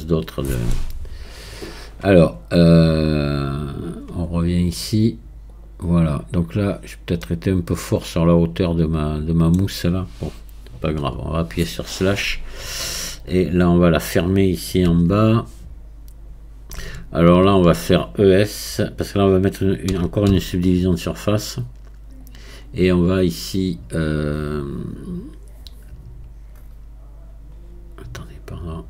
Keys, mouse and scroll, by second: 0.0-3.0 middle drag, 7.2-10.3 middle drag, 11.0 KP_Divide, 12.3-12.9 scroll down 1, 12.9-14.9 middle drag, 14.9 Tab, 17.0-19.9 alt+drag, 19.9 e.